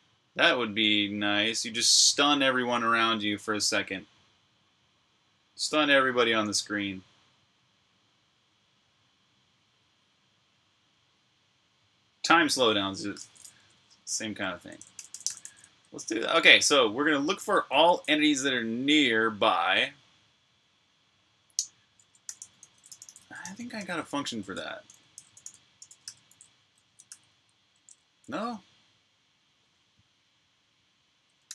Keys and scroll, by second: 13.4 Escape, 14.1-18.3 typing, 21.9-28.2 typing, 24.3 Escape, 31.3-31.5 typing.